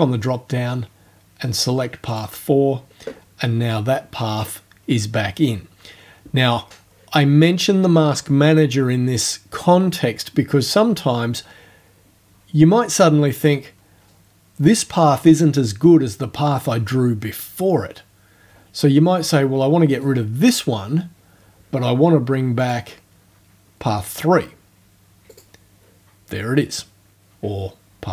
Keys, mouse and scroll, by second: 2.1 click, 20.0 right click, 22.6 click, 25.3 click.